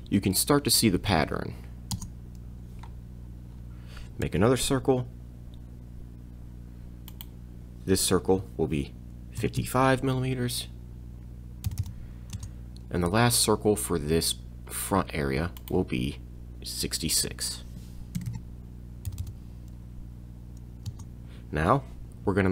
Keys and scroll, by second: 1.0 m, 1.9 Return, 4.2 c, 9.4 5, 11.7 m, 12.4 Return, 13.1 c, 18.2 6, 19.1 m, 20.9 Return.